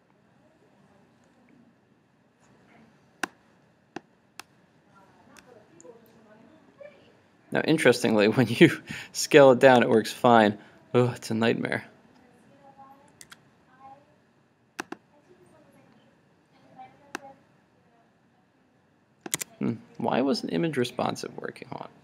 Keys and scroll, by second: 13.3 super+w, 19.4 super+Tab.